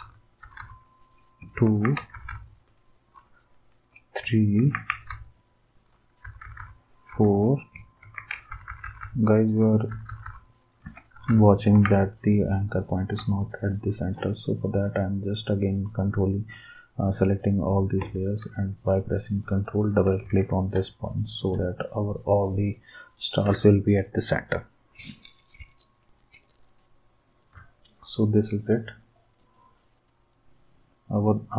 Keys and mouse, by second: 0.0 Right, 0.4 Right, 0.6 Right, 1.6 ctrl+d, 2.1 Right, 2.3-3.0 Right, 4.6 ctrl+d, 5.1-5.8 Right, 6.2 Right, 6.4 Right, 6.6 Right, 7.1 Left, 8.0 ctrl+d, 8.5 Right, 8.5 Left, 8.7 Right, 8.9 Right, 9.0 Right, 9.5 Right, 9.6 Right, 9.9 Right, 10.1 Right, 10.2 Right, 11.3 Right, 11.7 ctrl+s, 13.3 shift+click, 20.2 ctrl+s.